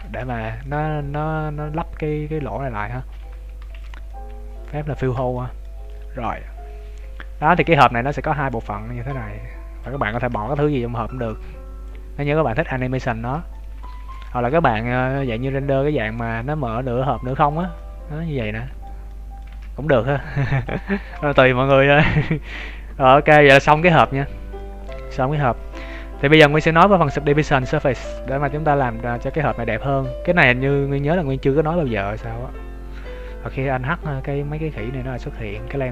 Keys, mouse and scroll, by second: 0.0 shift+middle click, 0.2 z, 0.6 middle click, 1.2-1.8 scroll down 3, 1.9 scroll down 4, 2.3-2.6 scroll up 1, 3.1 Tab, 3.4 scroll down 2, 3.6 ctrl+s, 4.1 middle click, 4.7 scroll down 1, 4.9 shift+middle click, 5.3 middle click, 5.8 right click, 6.2 middle click, 7.8 middle click, 8.4 click, 10.1 ctrl+z, 10.3 middle click, 10.8 right click, 11.4 click, 13.1 ctrl+z, 13.5 middle click, 13.9 ctrl+s, 14.4 middle click, 15.1 right click, 15.3 KP_3, 15.8 scroll up 2, 16.9 r, 17.7 middle click, 19.5 ctrl+z, 19.9 middle click, 20.4 ctrl+s, 20.9 shift+middle click, 21.0 shift+middle click, 22.1 middle click, 25.2 KP_3, 27.8-28.2 scroll down 2, 28.2 shift+middle click, 28.6-29.2 scroll up 5, 29.1 shift+middle click, 32.8 right click, 34.7 scroll down 2, 35.2 shift+middle click, 35.2-35.6 scroll down 7, 35.6 x.